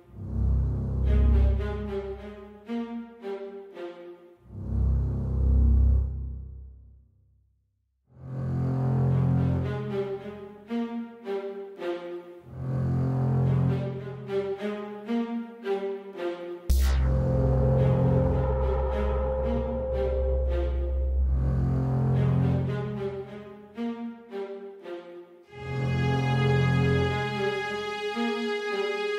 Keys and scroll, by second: 13.1-13.6 typing.